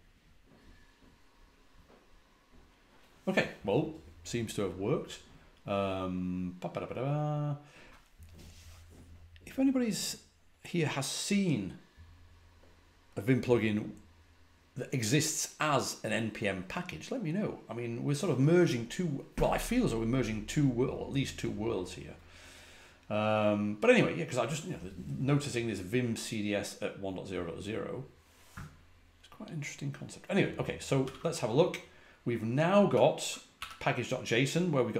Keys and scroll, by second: 30.9 typing, 32.8-33.7 typing.